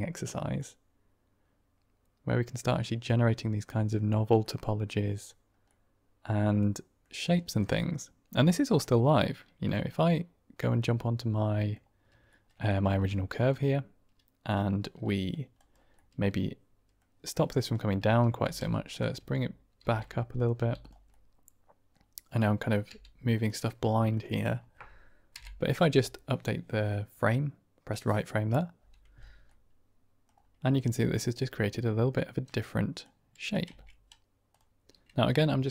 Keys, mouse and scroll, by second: 1.7-3.2 drag, 3.2-3.5 middle drag, 4.3-5.2 middle drag, 5.6-7.0 middle drag, 7.4 shift+middle drag, 7.6-8.3 middle drag, 8.7-9.0 middle drag, 9.5 click, 10.0-11.7 middle drag, 12.2 shift+middle drag, 12.5 drag, 12.6 typing, 12.8 Tab, 13.3 click, 13.8 click, 14.6 middle click, 15.5 click, 16.0 middle click, 16.9 click, 17.6-20.5 typing, 18.8 click, 20.2 click, 20.7 click, 21.0 middle click, 22.3 middle click, 22.8 g, 23.2 click, 23.9 shift+middle click, 24.2 middle click, 27.2 Right, 29.4 middle click, 30.6-32.9 middle drag, 33.6 Tab, 34.4 click.